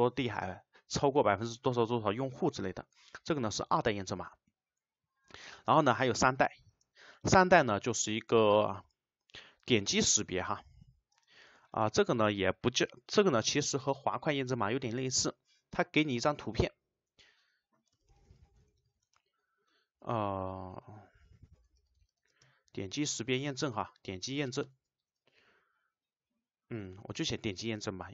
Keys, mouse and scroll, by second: 6.8 space, 7.2 shift+;, 11.2 space, 11.5 BackSpace, 19.1 space, 22.3 space, 24.0 Left, 24.7 BackSpace, 25.1 Right.